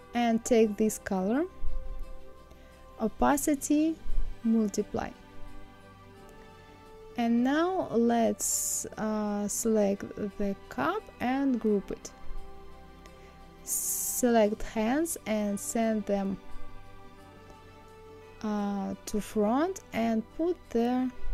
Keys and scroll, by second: 5.2 Down.